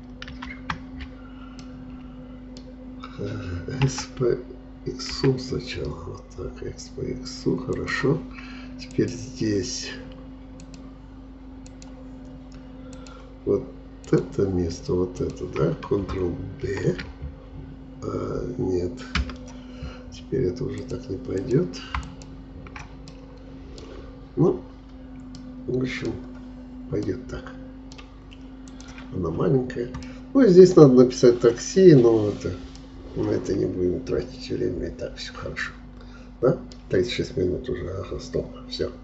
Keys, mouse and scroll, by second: 0.3 ctrl+z, 1.6-3.9 middle drag, 3.9 s, 9.0-16.7 drag, 16.7 ctrl+b, 20.8-23.1 drag, 23.1-24.3 middle drag, 24.3-24.7 scroll up 1, 24.7-25.0 scroll down 2, 25.4 middle click, 26.3-27.1 scroll up 4, 27.1-28.7 middle drag, 28.7 click, 29.4-29.9 scroll down 4, 30.1-31.9 middle drag, 31.9-32.7 scroll down 2, 32.7-35.8 middle drag.